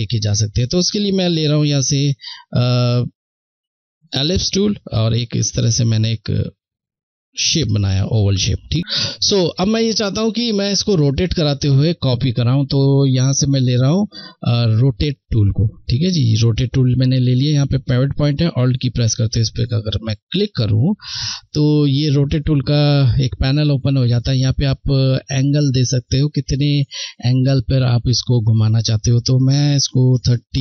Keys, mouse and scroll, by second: 13.4 click, 18.3 click, 19.4 alt+click, 20.8 click, 27.7 click.